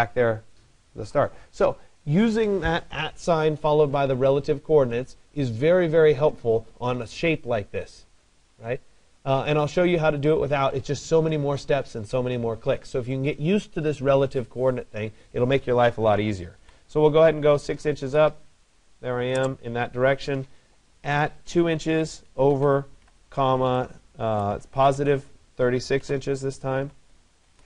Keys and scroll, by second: 17.7 Return, 23.9 BackSpace.